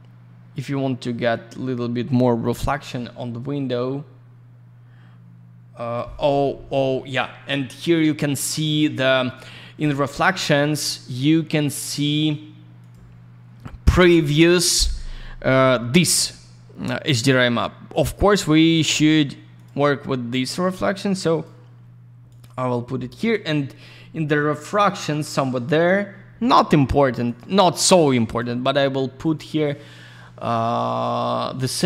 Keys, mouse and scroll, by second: 3.9-4.6 scroll up 1, 5.5-6.1 scroll down 1, 8.8 scroll down 1, 9.6 middle click, 9.7 middle click, 9.8 F10, 12.8 click, 12.9 click, 19.5 click, 19.6 click, 20.4 click, 22.2 click, 22.4 click, 23.9 scroll up 1, 27.2 click, 27.3 click, 27.8 click, 29.2 click, 29.3 click.